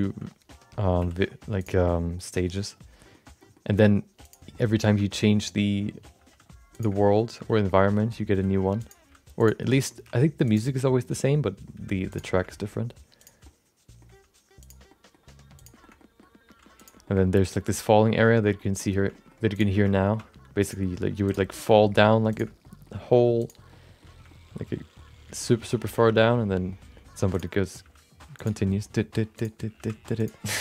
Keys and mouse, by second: 0.4 middle click, 1.0 e, 2.0-3.2 middle drag, 3.4 middle click, 3.6 r, 4.6 middle click, 5.1 middle click, 6.1 g, 7.3 middle click, 8.1 middle click, 8.3 r, 8.9 g, 9.6 middle click, 10.4 e, 10.7 middle click, 11.7 g, 12.5 middle click, 13.2 click, 13.4 middle click, 14.1 g, 14.9 middle click, 15.5 click, 15.8 shift+middle click, 15.9 middle click, 16.4 g, 17.1 middle click, 17.9 middle click, 18.6 middle click, 19.0 shift+middle click, 19.5 click, 19.7 shift+middle click, 19.9 middle click, 20.6 g, 21.2 click, 21.5 middle click, 22.3 shift+click, 22.6 middle click, 22.9 g, 23.8 middle click, 24.3 middle click, 24.9 middle click, 25.5 middle click, 26.1 middle click, 26.8 middle click, 27.3 click, 27.5 middle click, 27.8 g, 28.8 middle click, 29.3 click, 29.7 g.